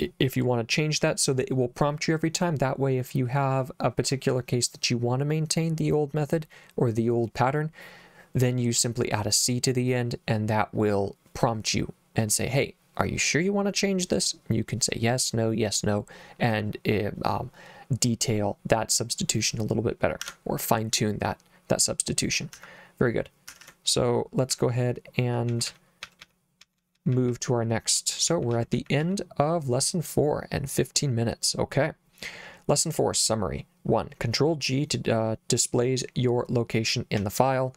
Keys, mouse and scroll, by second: 20.3 Escape, 22.6 h, 23.5 Escape, 24.5-29.0 typing, 37.2 k.